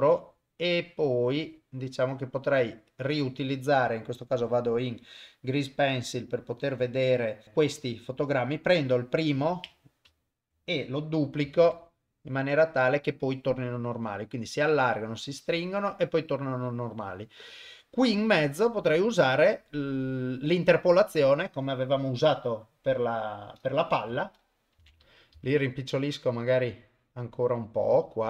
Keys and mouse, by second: 4.0-5.2 drag, 6.5 click, 7.7 click, 8.6 click, 10.2 shift+click, 11.6 shift+d, 13.6-18.6 drag, 19.8 click, 25.4 s.